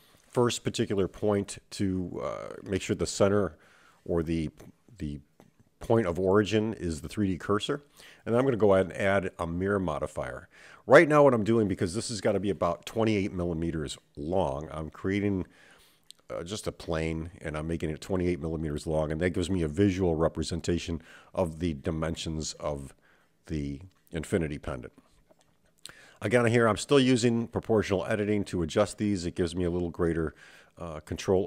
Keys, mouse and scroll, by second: 0.1 shift+a, 3.8 click, 4.5 Tab, 5.4 click, 8.3-13.7 drag, 12.6 m, 15.0-17.3 scroll down 5, 17.3-19.0 drag, 19.6 click, 20.6 Tab, 22.5 click, 23.9 g, 26.0 click, 26.3 g, 28.1 click, 28.4 g.